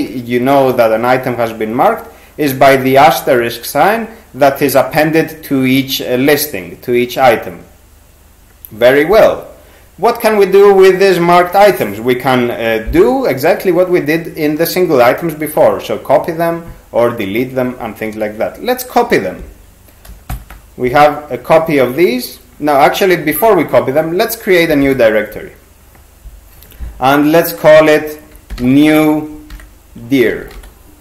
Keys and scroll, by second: 20.3 shift+c, 23.3 ctrl+g, 28.3-31.0 typing.